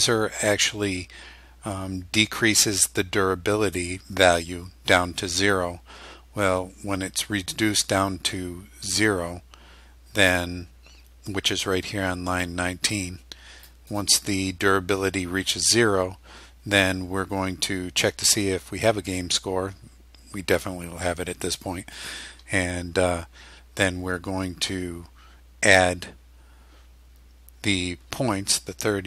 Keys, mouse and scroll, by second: 12.5-13.9 drag, 14.0 click.